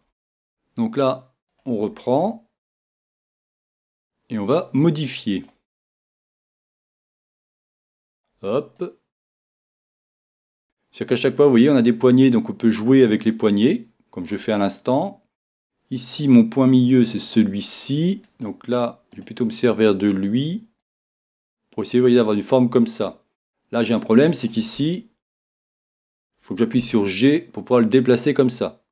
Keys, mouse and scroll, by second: 1.8-3.3 right drag, 3.3 click, 7.5-10.5 drag, 7.5 right click, 10.4 right click, 10.6-11.7 middle drag, 11.7-14.3 right drag, 12.7 click, 17.2-18.4 right drag, 20.8 click, 20.8-22.5 right drag, 26.8 g, 28.2 g.